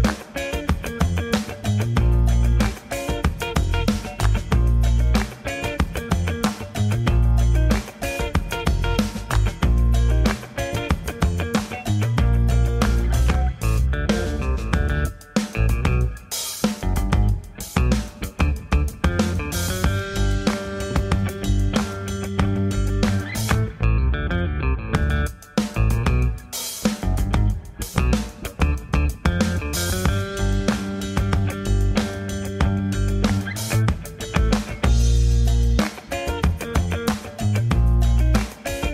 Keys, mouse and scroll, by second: 0.0 click, 0.1 b, 0.8 g, 1.4 r, 2.0 g, 3.6 click, 3.7 scroll down 2, 3.9 b, 4.4 g, 5.2 g, 5.7 click, 6.1-6.4 scroll up 1, 6.6 shift+middle click, 6.8-7.2 scroll up 2, 7.4 shift+middle click, 8.9 shift+middle click, 9.7 shift+middle click, 9.9 scroll down 3, 10.2 shift+middle click, 10.7 shift+middle click, 10.9 scroll up 1, 11.3 shift+middle click, 11.6 scroll up 2, 20.2 scroll down 4, 20.4 shift+a, 22.3 g, 22.9 s, 23.9 scroll up 2, 24.1 g, 24.5 s, 25.0 click, 25.6 h, 26.1 click, 26.7 middle click, 27.0 middle click, 27.2 g, 28.1 middle click, 28.1-28.5 scroll up 1, 28.5 alt+middle click, 29.0 g, 30.5 middle click, 31.4 click, 31.6 b, 32.1 b, 32.6 click, 32.8 g, 34.2 click, 34.7 b, 34.9 g, 35.8 alt+middle click, 36.0 alt+middle click, 36.3 alt+middle click, 36.7 scroll down 3, 37.0 shift+middle click, 37.2-37.6 scroll up 3, 37.7 shift+middle click, 38.5 g.